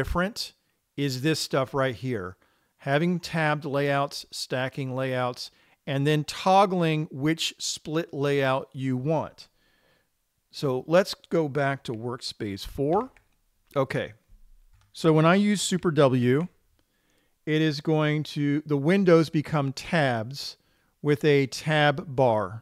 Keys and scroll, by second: 13.4 super+4, 16.8 super+w.